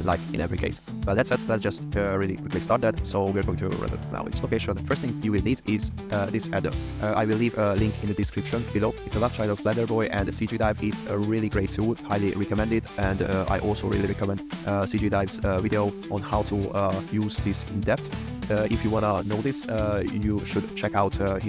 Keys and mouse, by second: 1.7 a, 2.2 alt+r, 2.4 alt+g, 2.9 drag, 4.3 drag, 5.7 click.